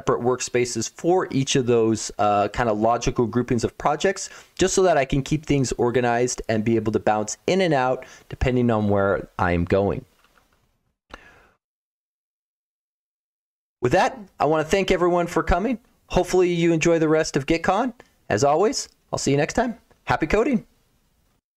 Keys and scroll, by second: 12.8 F17.